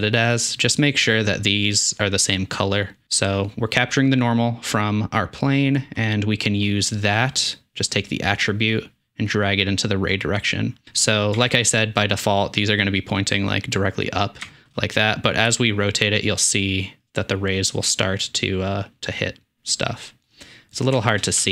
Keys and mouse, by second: 11.4 Tab, 14.4 shift+middle click, 15.5 r, 21.0 shift+middle click.